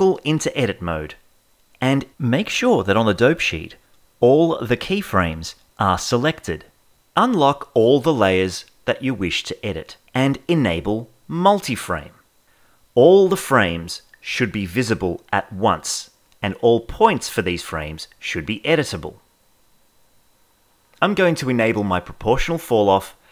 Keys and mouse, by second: 2.6-3.9 drag, 7.7 click, 8.7 click, 11.9 click, 14.3-18.8 shift+middle drag, 22.6 click.